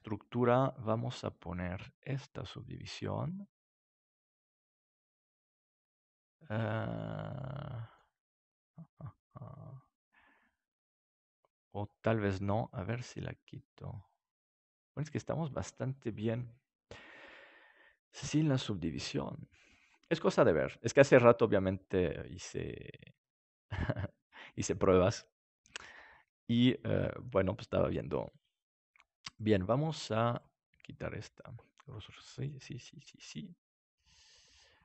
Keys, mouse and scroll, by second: 5.7-6.2 scroll up 1, 6.2-8.3 middle drag, 9.8-12.9 scroll up 1, 12.9-15.1 drag, 20.5-30.3 middle drag, 30.3-32.0 drag, 33.6-34.8 middle drag.